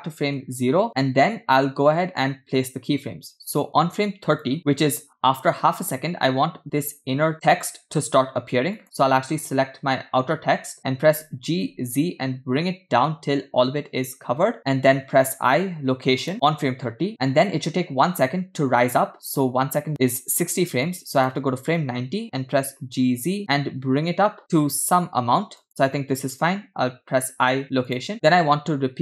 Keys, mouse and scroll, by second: 0.6 Left, 1.3 scroll down 3, 4.5 click, 8.7 click, 11.6 g, 15.7 i, 21.0 click, 22.8 g.